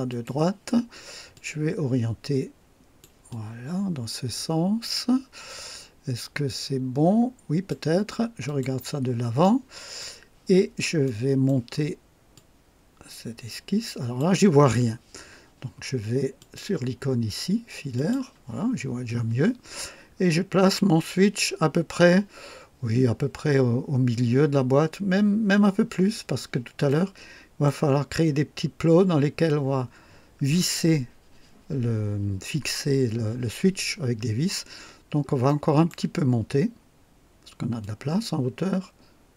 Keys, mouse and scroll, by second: 0.0 click, 1.2-3.1 drag, 3.2-7.8 drag, 8.4 click, 9.3 right click, 11.0 right click, 12.3-14.3 drag, 16.3 click, 17.9 click, 20.1 scroll up 2, 26.8-27.8 right drag, 34.7-35.1 scroll down 2, 35.4 right click, 37.8-39.3 drag.